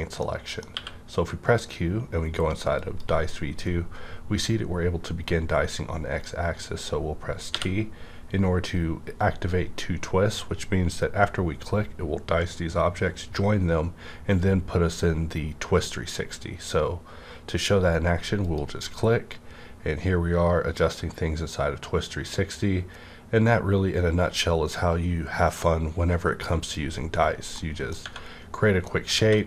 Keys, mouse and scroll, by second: 0.2-2.8 middle drag, 0.7 q, 2.7 click, 2.8 click, 3.6-4.3 scroll up 1, 4.3-4.7 scroll down 1, 4.7-5.2 scroll up 1, 5.5 scroll down 1, 5.7-7.5 scroll up 1, 7.5 scroll, 7.5 t, 16.6-17.7 scroll down 1, 16.6 t, 18.4 click, 20.3 scroll down 1, 26.6 click, 26.6 scroll down 1, 27.6 middle click, 28.0 Right, 28.0 scroll up 1, 28.8 middle click, 29.2 3, 29.4 click.